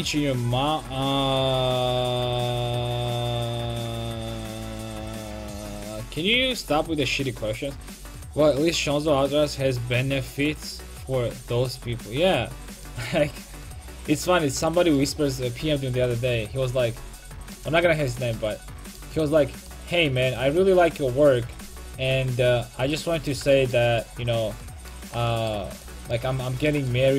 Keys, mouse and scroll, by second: 12.8-14.1 middle drag, 14.2 middle click, 15.0 middle click, 16.1 KP_5, 23.5-24.6 middle drag, 25.7 right click, 25.9 Tab.